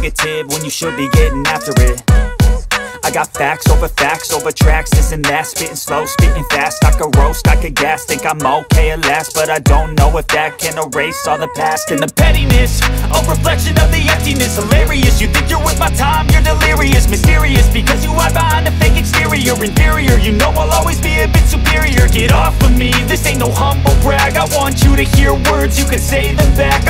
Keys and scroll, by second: 8.7 ctrl+z, 10.7 space, 14.0 alt+space, 15.7-17.0 typing, 24.0 alt+space.